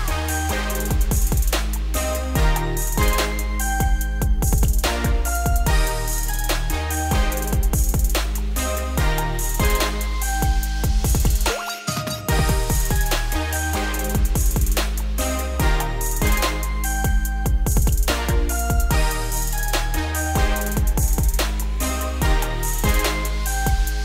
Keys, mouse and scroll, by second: 1.0 click, 1.4-1.9 middle drag, 1.9 g, 4.8-5.3 scroll down 2, 5.3 click, 5.6 scroll down 1, 5.7-6.6 middle drag, 6.6 click, 6.8 Tab, 7.0 scroll up 4, 7.7 Tab, 8.1 click, 8.6 Tab, 8.9 z, 9.4 1, 10.0-10.6 scroll up 1, 10.6 s, 11.6 z, 11.9 middle click, 12.6 Tab, 12.8 scroll down 1, 12.9-13.4 middle drag, 13.4 ctrl+s, 13.7-14.3 scroll down 4, 14.3 click, 14.6-15.1 scroll down 3, 15.1-17.2 middle drag, 17.2-17.6 scroll down 4, 17.6-18.9 middle drag, 18.9-19.4 scroll up 5, 19.4 shift+scroll down 1, 19.5-20.2 shift+middle drag, 20.2-20.8 scroll down 3, 20.8-23.3 scroll down 1.